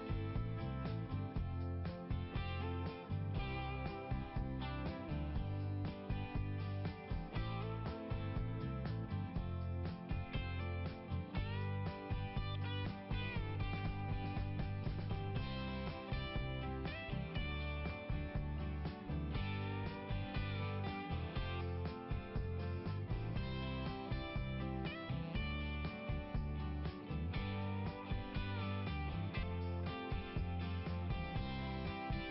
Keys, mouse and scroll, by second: 0.3 click, 0.3 click, 1.2 click, 1.4 click, 2.4 click, 2.6 click, 7.7 click, 15.7 scroll down 1, 19.5 click, 23.6 click, 26.1 click, 26.2 click, 27.9 click, 28.0 click, 28.1 click, 28.1 click, 28.9 click.